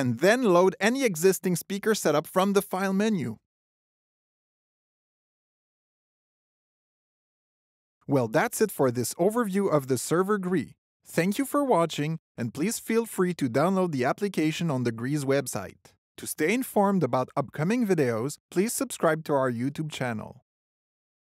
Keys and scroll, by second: 0.6 super+l.